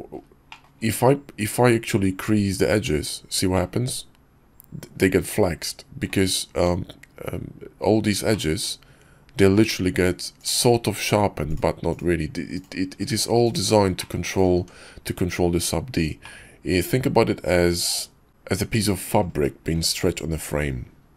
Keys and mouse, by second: 0.5 click, 1.9 q, 3.5-5.1 drag, 5.1-6.1 middle drag, 6.5 Tab, 8.3 click, 9.5 ctrl+click, 10.3 ctrl+click, 11.9-13.0 ctrl+drag, 13.1 q, 14.0 click, 14.6 Tab, 16.2-19.2 drag.